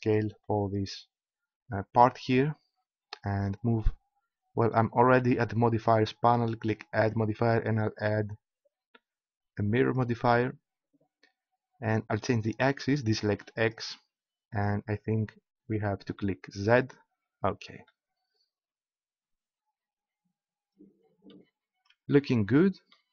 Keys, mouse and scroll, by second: 5.3 middle click, 6.9-9.3 drag, 11.9-14.6 middle drag, 14.6 click, 15.5 middle click, 16.7 middle click, 17.3-18.6 drag, 18.6-19.9 middle drag.